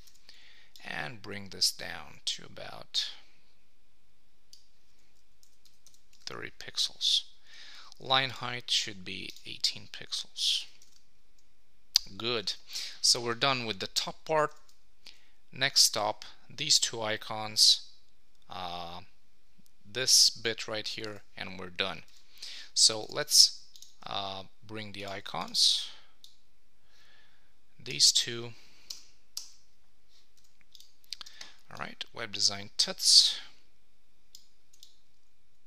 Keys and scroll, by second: 5.4 Down, 6.2 super+s, 10.9 super+s, 14.6 super+Tab, 21.1 super+Tab, 28.9 Return, 34.7 shift+a.